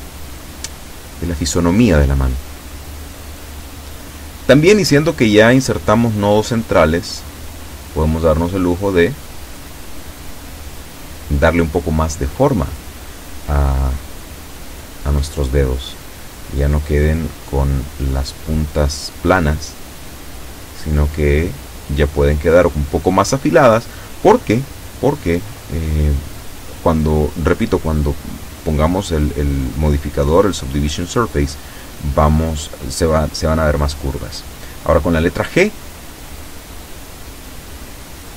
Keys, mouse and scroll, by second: 1.2 shift+middle click, 2.1 shift+scroll up 3, 2.7 shift+middle click, 3.4 shift+a, 4.1 b, 4.7 click, 5.9 b, 6.2-7.2 drag, 7.9-9.6 drag, 10.7 s, 11.5 a, 13.2 b, 13.4 click, 14.7 b, 15.1 click, 16.2-17.5 drag, 18.0 a, 19.5 b, 19.8 click, 21.1 b, 21.5 click, 24.8 g, 27.8 click, 29.7 a, 30.2 b, 30.6 click, 31.5 b, 31.8 click, 34.6 g.